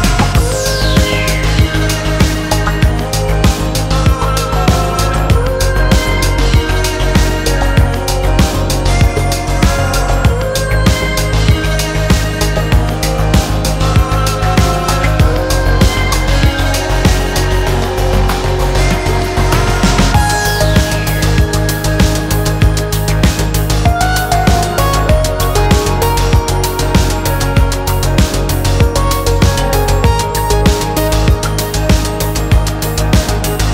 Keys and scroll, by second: 6.5 1, 6.9 Return, 15.7 0, 16.1 ., 16.1 4, 16.7 Return, 30.4 6, 30.4 0.